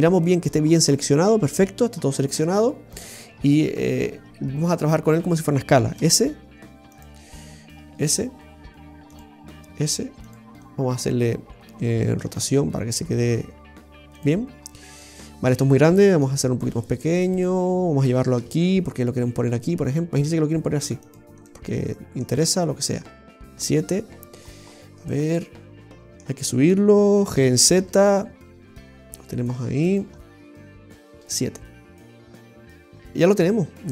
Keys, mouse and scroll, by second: 0.2 shift+middle click, 1.7-5.1 scroll down 34, 5.9 scroll down 2, 5.9 s, 7.7 s, 9.6 s, 10.6 scroll down 2, 10.9 scroll up 1, 11.0-11.5 scroll down 2, 12.2 r, 14.5-15.3 scroll up 2, 14.9 shift+middle click, 16.2 s, 18.3 g, 21.4 middle click, 22.4 shift+middle click, 23.4 KP_7, 24.3-25.0 scroll up 5, 25.0 middle click, 27.3 g, 30.1 middle click, 30.9 KP_7, 32.0 scroll down 1, 32.2 shift+middle click, 32.9 middle click.